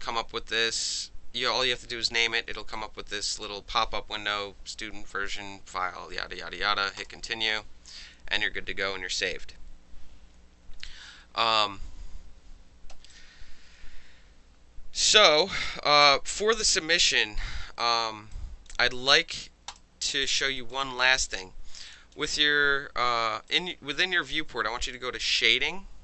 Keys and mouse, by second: 2.7 click, 7.0 click, 13.1-15.7 alt+drag, 15.7-16.0 alt+middle drag, 16.0-16.3 alt+drag, 16.3 alt+middle drag, 16.6 alt+drag, 16.9-17.4 alt+middle drag, 17.7 alt+middle click, 17.8 alt+right drag, 18.3-18.7 alt+drag, 19.7 alt+click, 20.2 alt+click, 20.4 alt+middle click, 20.6 alt+drag, 20.7 alt+middle click, 20.8 alt+drag, 21.0-21.5 alt+middle drag, 21.9 alt+drag, 23.5 alt+click, 25.2 click, 25.4-26.0 middle drag.